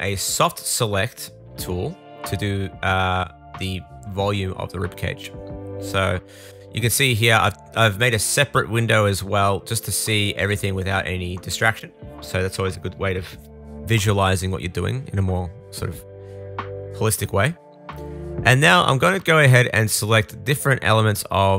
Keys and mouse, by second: 4.0-17.1 drag, 13.9-16.1 middle drag, 13.9-16.1 right drag, 16.7 middle click, 16.7 right click, 17.1 middle click, 17.2-21.2 shift+drag, 19.1 middle click, 19.1 right click, 20.2-21.5 middle drag, 20.2-21.2 right drag, 20.5 l.